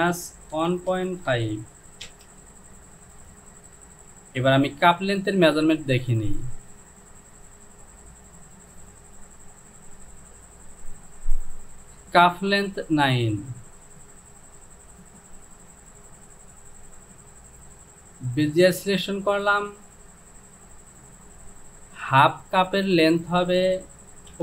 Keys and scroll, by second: 0.6 KP_1, 1.0 KP_Decimal, 1.4 KP_5, 2.1 Return.